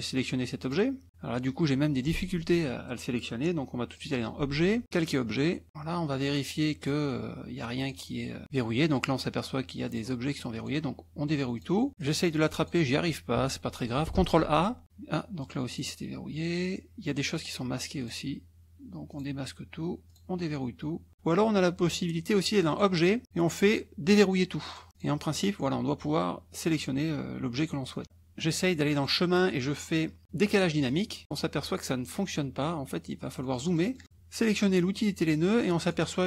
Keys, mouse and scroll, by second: 0.6 click, 1.4 click, 3.9 click, 5.7 click, 6.8 click, 7.8 click, 9.8 click, 10.5 click, 11.6 click, 13.4 -, 14.2 ctrl+a, 15.7 click, 17.3 click, 18.0 click, 19.2 click, 20.1 click, 22.7 click, 24.8 click, 25.0 click, 29.0 click, 31.0 click, 33.4 click, 35.8 click.